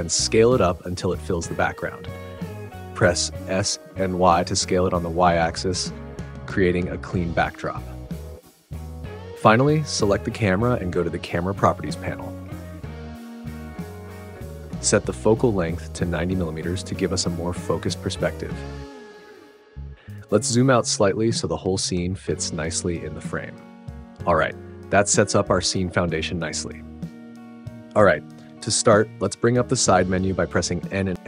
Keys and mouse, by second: 0.8 click, 1.5 g, 1.8 z, 3.2 s, 3.6 y, 5.4 x, 6.3 click, 6.7 g, 6.9 x, 8.9-10.5 drag, 13.7 click, 16.3-19.1 drag, 22.3 shift+click, 30.2 n.